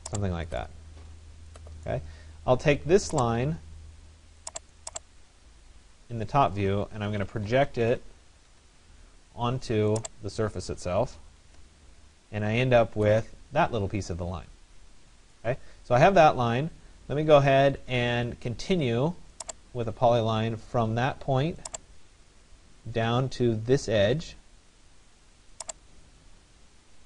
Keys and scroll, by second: 8.1 Return.